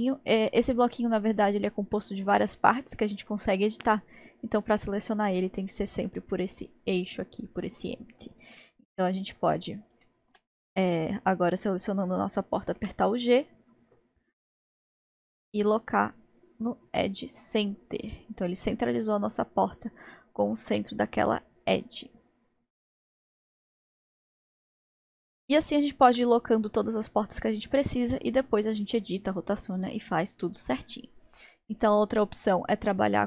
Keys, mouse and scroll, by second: 1.4 click, 2.3 click, 3.0 click, 4.7-6.3 drag, 6.3-12.8 middle drag, 12.8 g, 17.9-18.6 scroll up 6, 18.6-19.0 scroll down 1, 19.0-22.2 middle drag, 22.9-23.5 scroll down 3, 23.5-26.3 middle drag, 26.3-27.4 scroll down 1, 27.4-29.3 scroll down 1, 31.9 scroll up 1.